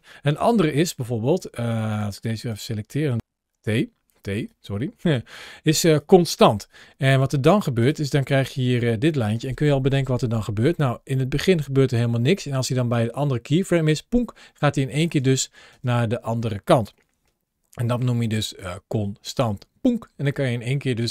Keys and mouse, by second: 0.2 t, 0.7 click, 1.2 t, 2.2 drag, 7.6 click, 10.6-14.6 drag, 14.9 space, 15.6 space, 20.8 space.